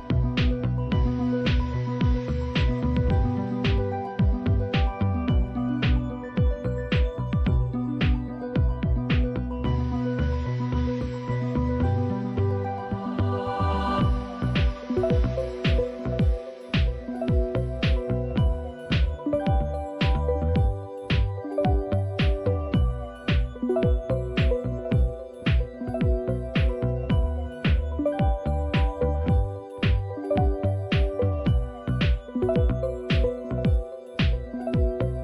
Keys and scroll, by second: 17.3 c, 20.1-25.5 typing, 27.1-29.9 typing.